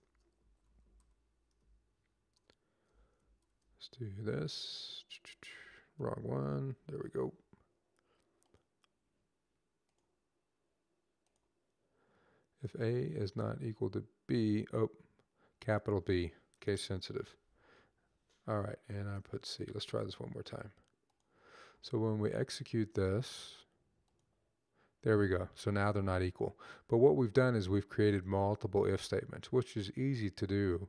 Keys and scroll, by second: 0.0-1.3 typing, 3.1 typing, 5.0-6.2 typing, 16.9 c, 19.2 b.